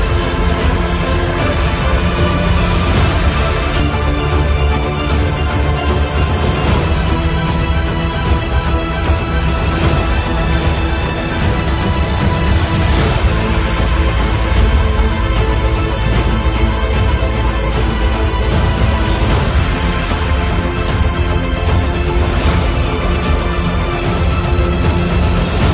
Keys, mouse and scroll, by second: 1.0-5.6 alt+drag, 5.6 v, 7.4-11.9 drag, 16.5 click, 16.5 typing, 16.9-25.7 shift+drag, 18.2 typing.